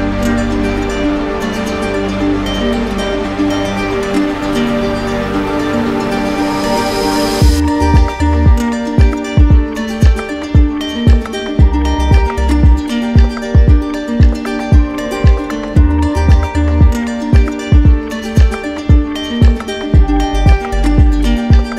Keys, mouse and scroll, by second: 2.4 alt+click, 3.0 alt+click, 4.1 click, 5.6 click, 9.6 right click, 10.4 right click, 10.9 alt+middle click, 12.1 alt+right click, 12.9 alt+right click, 19.7 z, 21.4 z.